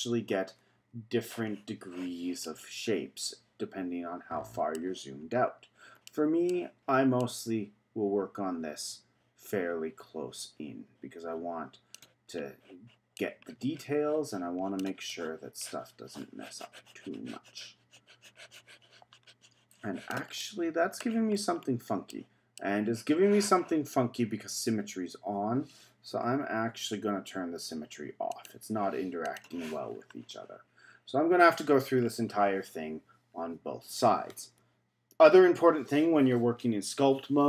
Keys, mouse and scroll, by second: 0.6 z, 1.4 z, 2.4-5.2 middle drag, 5.2-6.0 scroll up 5, 6.0-7.2 middle drag, 7.2-10.3 drag, 12.3-13.2 scroll up 2, 13.2-18.1 drag, 20.4 middle click, 21.3-22.1 scroll down 3, 22.1-25.1 middle drag, 26.8 z, 27.7 z, 28.3 click, 29.3 click, 29.9-32.0 scroll up 4, 32.0-35.2 scroll down 3, 35.5 f.